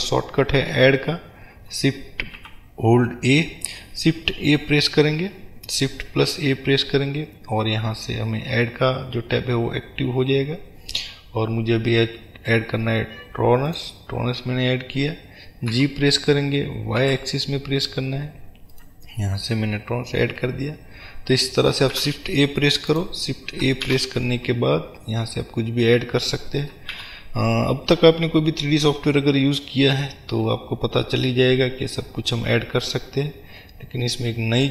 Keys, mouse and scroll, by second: 2.4 shift+a, 18.9 click, 22.9 click, 23.8 shift+a.